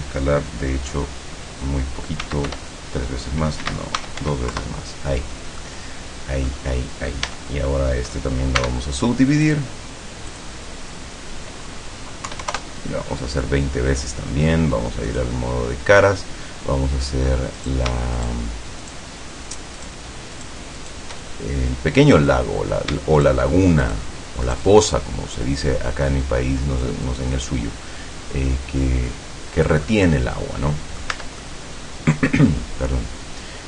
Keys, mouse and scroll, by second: 2.3 s, 2.6 3, 3.7 Escape, 3.9-4.8 typing, 5.7-6.7 middle drag, 7.3 Tab, 8.7 w, 9.6 click, 10.4 click, 12.3 KP_2, 12.5 KP_0, 15.1 click, 17.7 right click, 18.3 shift+right click, 18.9 shift+right click, 19.9 shift+right click, 20.4 shift+right click, 20.9 shift+right click, 21.3-22.4 shift+middle drag, 22.7 scroll up 1, 23.3 shift+right click, 23.9 shift+right click, 24.5 shift+right click, 24.9-26.3 shift+middle drag, 27.1-29.9 drag, 29.9-31.3 middle drag, 31.2 Tab, 31.5-33.6 middle drag.